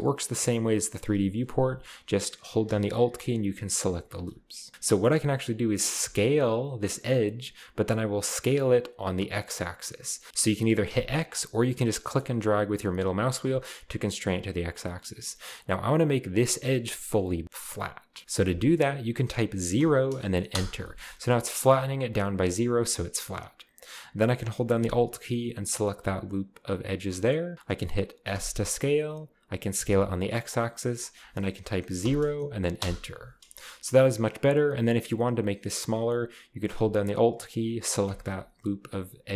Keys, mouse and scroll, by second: 0.4 alt+right click, 1.6 a, 1.7 a, 3.7 alt+right click, 4.4 alt+right click, 4.4 typing, 5.0-6.0 scroll up 2, 5.0-6.0 middle drag, 6.0 s, 9.0-10.3 middle drag, 10.3 x, 10.9 x, 11.7 middle click, 12.4 typing, 19.8 0, 20.5 Return, 20.7-21.5 scroll down 1, 21.5-22.0 scroll down 1, 22.1-24.8 scroll up 1, 25.8-26.6 alt+right drag, 28.3 s, 29.8 x, 32.0 0, 32.8 Return, 38.1 alt+right click.